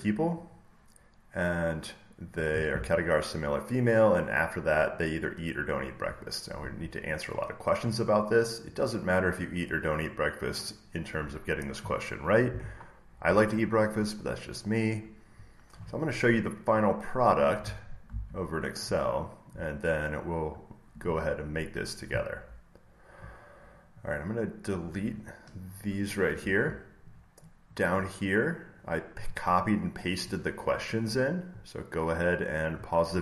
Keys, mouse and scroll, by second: 2.1 click, 8.6 click, 9.4 click, 10.6 click, 12.4 click, 13.9-16.6 middle drag, 13.9-14.5 scroll down 1, 14.5-16.5 scroll down 1, 16.5 scroll down 1, 17.5 middle click, 17.5-17.9 scroll down 1, 17.9 scroll, 18.0 alt+Tab, 18.0 middle click, 18.0-18.7 scroll down 1, 19.8 scroll, 21.7 middle click, 24.9-26.9 drag, 25.7 Delete, 27.0 click, 27.9-29.0 drag, 29.8 click.